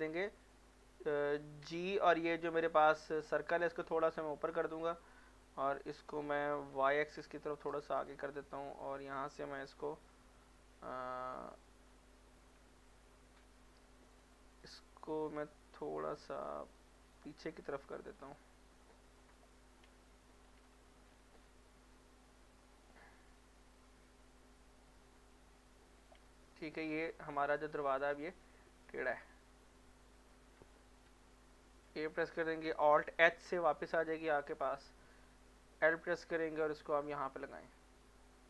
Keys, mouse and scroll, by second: 1.6 g, 2.2 scroll up 1, 3.2-4.9 scroll down 1, 5.7 x, 6.7 y, 8.0 click, 9.8 middle click, 10.2 z, 11.7 z, 11.8 z, 12.7 Tab, 13.4 middle click, 14.1-17.0 drag, 17.6 scroll up 1, 18.1 scroll down 1, 19.2 click, 20.2 g, 20.4-22.8 scroll up 1, 22.8 click, 24.4 g, 26.0 click, 26.3 middle click, 26.9 Tab, 28.1 scroll down 1, 28.4 middle click, 29.0 z, 29.5 z, 29.6 z, 30.2 middle click, 30.6 Tab, 31.9 a, 33.0 alt+h, 34.0 middle click, 34.5 click, 35.9 l, 36.6-38.4 drag.